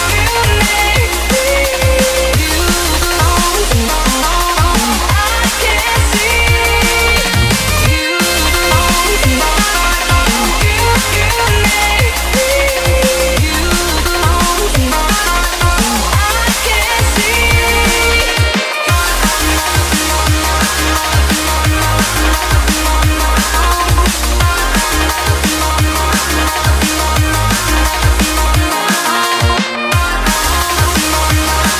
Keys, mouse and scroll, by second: 0.0 click, 3.5-4.9 typing, 5.6-12.1 drag, 12.4-21.9 drag, 21.9 right click, 24.5 click, 26.5 F10, 27.0 click, 29.6-30.9 typing, 31.5-31.7 drag.